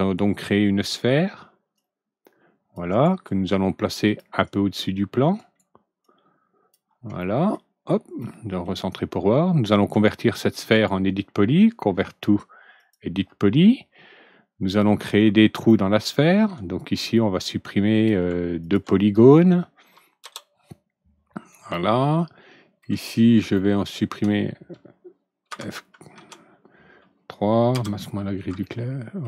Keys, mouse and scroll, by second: 1.7 click, 2.8 right click, 4.0 click, 5.3 right click, 6.0 click, 7.1 middle click, 7.7 scroll down 1, 8.2 middle click, 9.9 right click, 10.7 right click, 12.7 click, 14.6 click, 15.5 alt+scroll up 1, 15.6 alt+middle click, 16.7-17.2 alt+scroll up 1, 17.9 click, 18.6 ctrl+click, 20.2 Delete, 21.7-22.8 alt+middle drag, 23.0 alt+middle click, 23.5-24.2 alt+middle drag, 25.4 alt+F4, 26.1 alt+F3, 27.7 alt+g, 28.6-29.2 alt+middle drag.